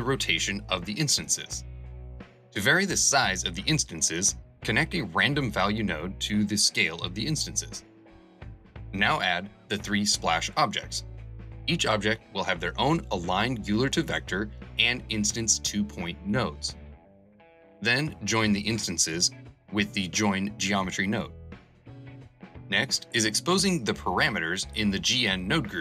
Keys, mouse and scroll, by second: 21.4 n.